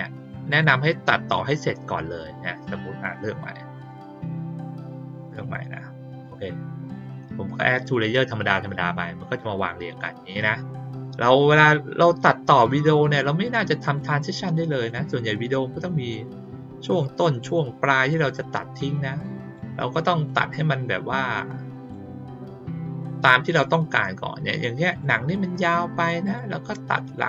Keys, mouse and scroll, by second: 0.4 click, 2.6 ctrl+click, 3.0 ctrl+click, 3.8 ctrl+click, 5.2 ctrl+click, 6.2 click, 8.6 click, 11.6 click, 12.8 click, 13.8 click, 14.8 click, 15.5 click, 17.0 click, 18.0-19.5 drag, 20.2 click, 21.3 click, 24.8 click, 26.2 click.